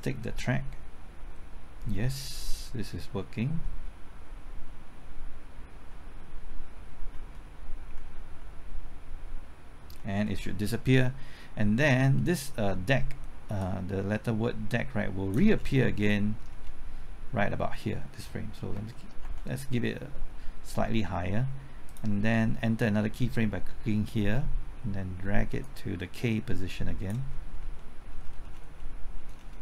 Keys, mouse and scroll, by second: 0.0-0.2 typing, 12.0-13.6 scroll down 1, 13.6-15.5 drag, 15.6 scroll down 1, 18.7 Right, 21.9 click, 27.3-27.8 scroll up 1, 27.8 middle click, 28.2-28.8 scroll up 1, 28.8 middle click, 29.4-29.6 scroll down 1.